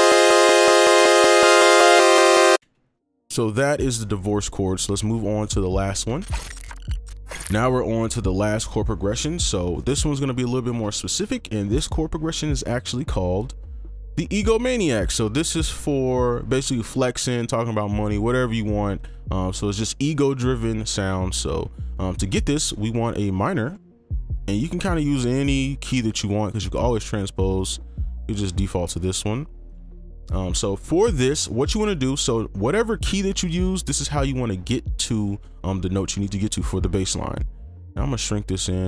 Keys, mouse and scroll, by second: 2.6 space, 6.0 right click, 13.5-13.8 scroll up 1, 30.5 right click, 33.8 right click.